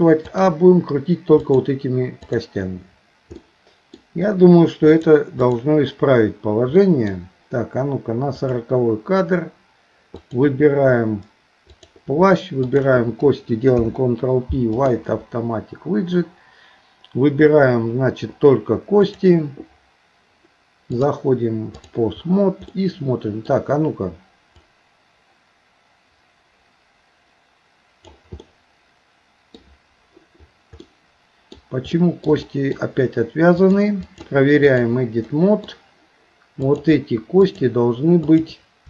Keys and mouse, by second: 0.3 click, 1.4 click, 3.4 middle click, 5.0 click, 6.8 middle click, 8.5 click, 10.1 click, 11.8 click, 12.6 shift+click, 13.7 ctrl+p, 19.0 click, 21.0-22.0 drag, 22.8 middle click, 24.7-28.3 drag, 28.4-29.6 middle drag, 30.8 middle click, 32.0 shift+middle click, 32.4 middle click, 33.6 click, 34.0 click, 35.3 middle click, 36.7 click, 37.4 shift+click.